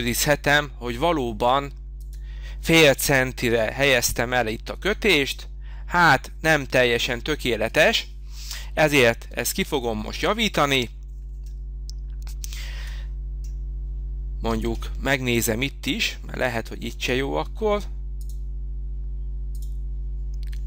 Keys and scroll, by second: 8.8 Escape, 10.4 space.